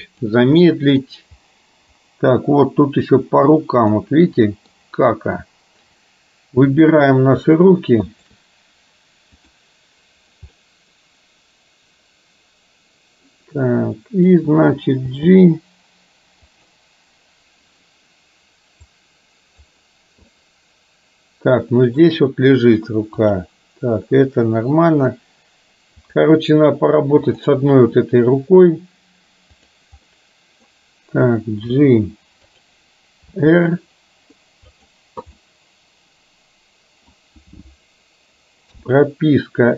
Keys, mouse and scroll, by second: 0.2 click, 0.7 middle click, 4.7 middle click, 6.9 drag, 10.7-14.4 middle drag, 15.1 g, 19.1 click, 20.4-22.1 middle drag, 23.3 click, 27.3 click, 29.7 click, 30.2 middle click, 31.9 g, 33.4 r, 35.6-37.2 middle drag, 38.8 i.